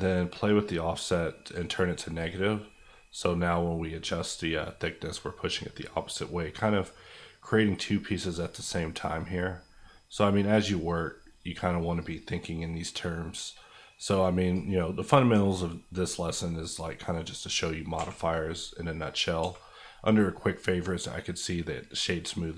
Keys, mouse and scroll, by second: 15.0 middle click, 15.7-16.5 scroll up 1, 16.5-16.8 scroll down 1, 16.8 middle click, 17.9 q.